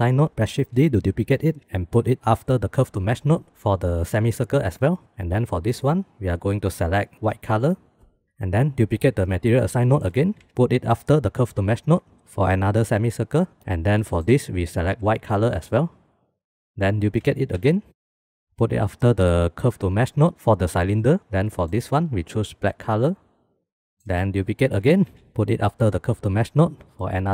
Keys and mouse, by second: 0.5 shift+d, 2.5 click, 5.7 click, 6.3-7.8 drag, 8.8 click, 9.0 middle click, 9.4 shift+d, 10.1 middle click, 10.4 click, 11.3 middle click, 14.0 middle click, 15.3 click, 16.7 click, 17.4 shift+d, 18.2 middle click, 18.4-20.1 drag, 20.3 middle click, 20.4 click, 21.4 click, 22.6-23.7 drag, 24.4 middle click, 24.6 shift+d, 25.4 click.